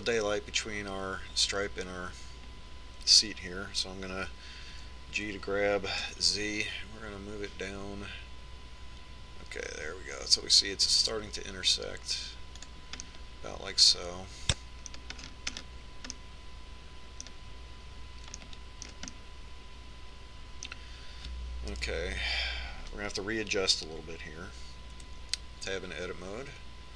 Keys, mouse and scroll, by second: 6.5 g, 14.8-16.6 middle drag, 17.0-19.8 middle drag, 20.2-23.6 middle drag, 23.6 KP_1, 26.8 Tab.